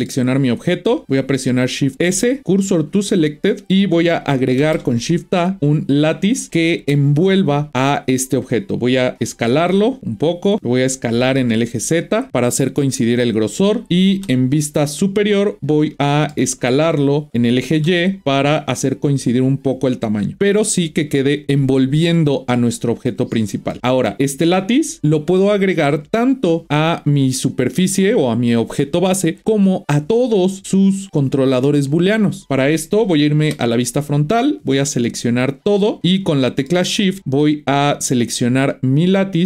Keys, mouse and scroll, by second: 0.4 click, 0.9 click, 1.9 shift+s, 4.6 shift+a, 6.8 KP_1, 7.7-9.7 scroll up 5, 9.7 s, 11.1 s, 14.2 KP_7, 15.3-16.0 scroll down 5, 16.0-16.5 shift+middle drag, 16.5 scroll up 1, 17.3 s, 21.1 scroll up 1, 21.2 middle click, 22.0-24.8 middle drag, 24.8 scroll down 2, 27.1 click, 33.4 KP_1, 34.4-35.2 scroll up 3, 35.2 click, 36.1-37.0 middle drag, 37.0 scroll down 2, 37.2-39.0 shift+middle drag, 39.0 shift+click.